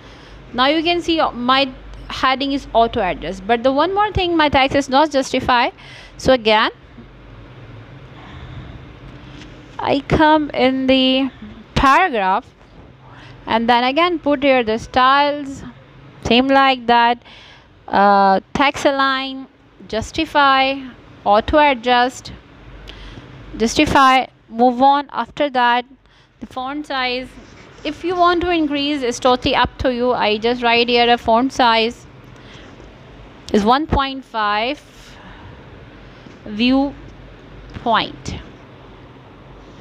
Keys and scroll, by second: 3.9-5.4 typing, 5.6 Return, 9.2 t, 10.1 Return, 17.3 Right, 19.6 space, 19.9 f, 21.7 Return, 23.8 1, 24.3 ., 24.9 5, 27.1 v, 27.5 w, 31.9 Right, 32.2 space, 32.5 f, 34.3 Down, 35.4 Return.